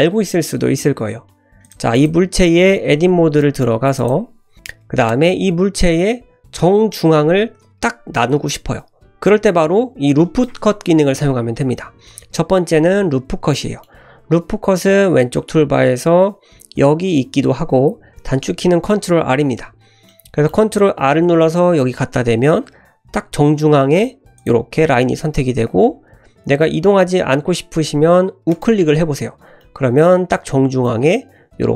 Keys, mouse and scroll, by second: 1.6 click, 1.9 click, 2.8 Tab, 3.4 middle click, 3.9 click, 4.5 scroll up 1, 5.3-6.5 middle drag, 13.5 middle click, 20.0 middle click, 21.0 ctrl+r, 29.5-29.9 middle drag, 30.8-31.7 middle drag.